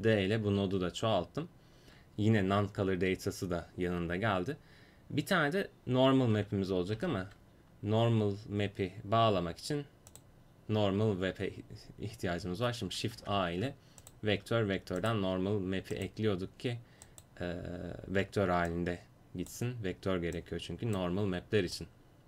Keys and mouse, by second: 6.9 shift+a, 13.2 shift+a, 18.7-22.2 drag.